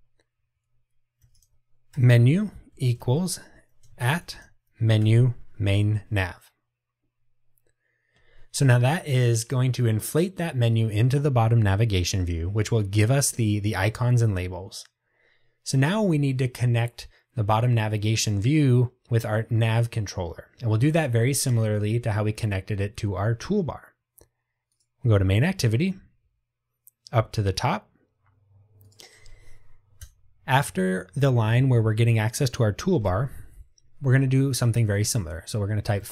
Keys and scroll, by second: 5.1 Return.